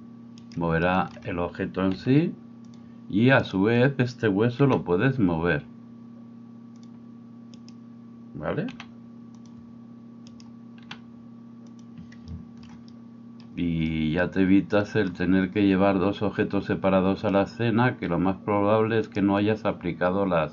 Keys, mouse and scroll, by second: 1.9 r, 2.8-7.6 middle drag, 4.7 r, 7.6-8.7 right drag, 8.7-10.3 middle drag, 8.7 r, 10.3 right click, 10.5-20.5 middle drag, 10.9 r, 19.0 right click.